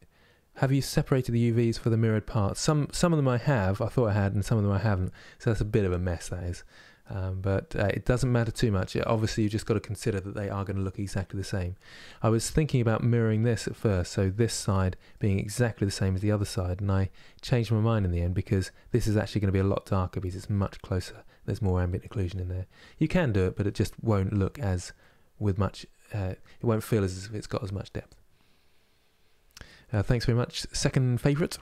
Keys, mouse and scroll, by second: 3.7-12.5 middle drag, 12.5 scroll up 3, 13.8-24.3 middle drag, 24.3 scroll down 2, 25.2-31.6 middle drag.